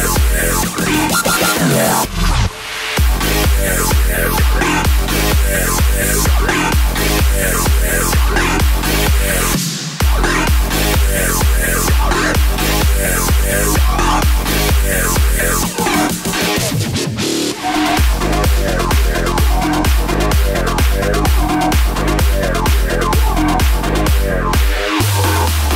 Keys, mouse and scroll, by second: 0.0-2.6 drag, 5.0-10.7 drag, 12.3-14.0 drag, 14.0 KP_7, 14.5-15.1 scroll up 4, 15.1-15.8 shift+middle drag, 15.8 shift+d, 17.9 click, 19.1 KP_0, 19.9 click, 20.3 scroll up 3, 22.3 scroll down 3, 23.3 click, 24.0-24.6 scroll up 4, 24.6-25.7 middle drag.